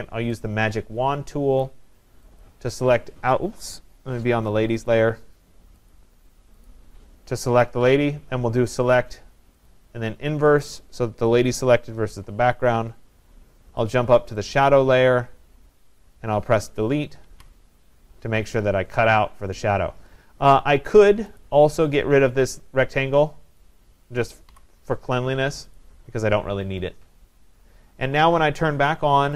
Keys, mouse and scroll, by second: 1.7 click, 2.4 click, 4.9 click, 5.9 click, 6.7 click, 9.7 click, 10.6 click, 14.0 click, 14.6 click, 17.3 Delete, 21.5 click, 23.6 click, 24.5 Delete, 25.8 click.